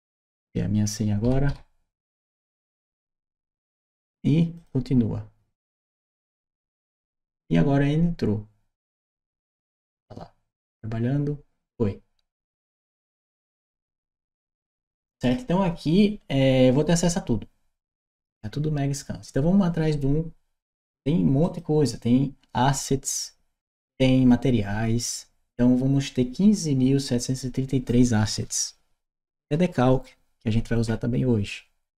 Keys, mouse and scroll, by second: 1.1 2, 2.1 4, 4.4 click, 8.9 click, 13.0 click, 21.2 click.